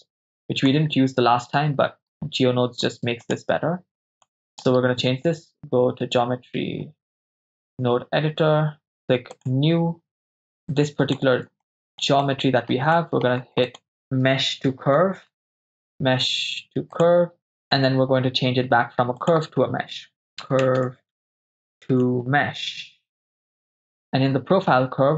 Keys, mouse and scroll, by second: 3.2-4.2 drag, 4.5-7.8 drag, 9.4 click, 10.7 click, 11.7 shift+middle click, 12.2 ctrl+middle click, 13.0 middle click, 13.4 shift+a, 18.6 shift+a, 24.7 shift+a.